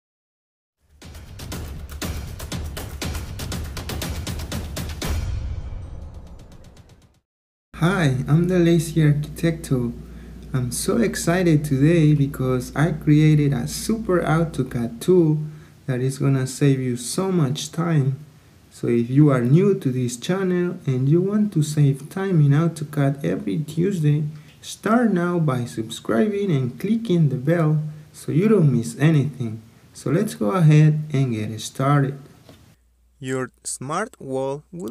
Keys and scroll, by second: 32.8 Escape.